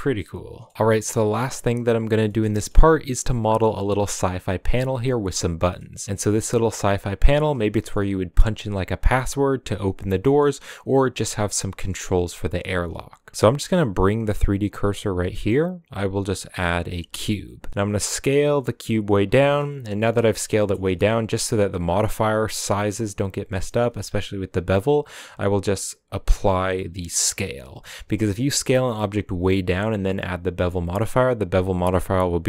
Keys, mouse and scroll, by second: 2.1-5.7 scroll up 3, 2.2-2.7 shift+middle drag, 2.7-8.9 middle drag, 8.9-10.2 scroll down 2, 9.1-10.5 middle drag, 10.5 scroll up 2, 12.1-13.7 scroll down 1, 13.7 click, 15.3-16.9 middle drag, 16.9 shift+a, 17.4 scroll down 2, 17.7 s, 19.4 shift+middle drag, 19.6 scroll up 3, 19.8 s, 20.5 middle drag, 20.8 scroll up 3, 20.8 shift+middle click, 21.5 s, 23.5 middle click, 23.7 scroll up 2, 27.4 ctrl+a, 27.8-28.4 shift+middle drag, 28.4 s, 30.5 middle click, 30.7-31.6 scroll up 2.